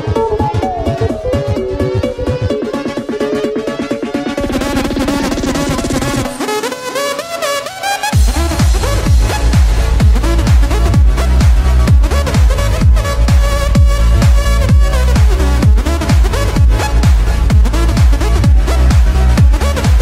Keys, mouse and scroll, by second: 3.5-5.8 drag, 5.8 scroll down 1, 6.0-8.4 middle drag, 8.4-16.6 drag, 19.9-20.0 drag.